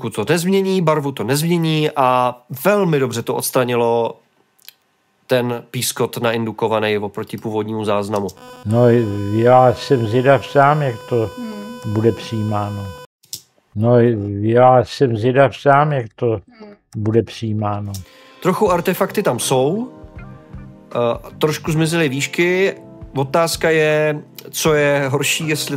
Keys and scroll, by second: 8.6 space.